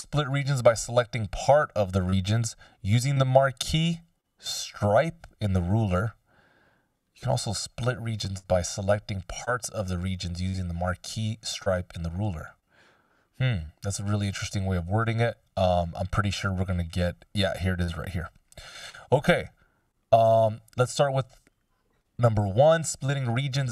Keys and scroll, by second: 20.1 F16.